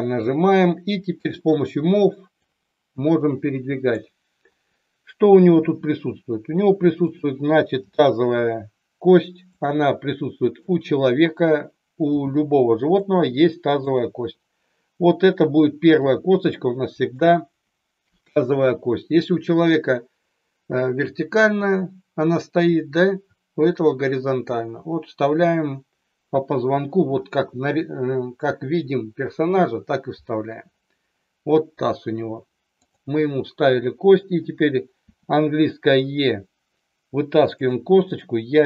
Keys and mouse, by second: 1.2 click, 2.4-3.8 drag, 5.7 r, 7.7 g, 9.4 click, 10.6 click, 12.1 g, 12.9 click, 15.9 g, 16.9 click, 32.7 click, 34.9 e, 37.4 click, 38.1 click.